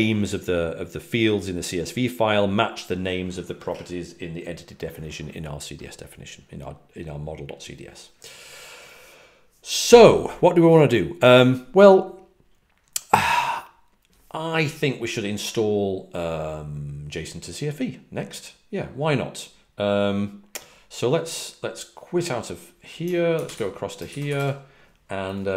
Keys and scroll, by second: 24.2 Return.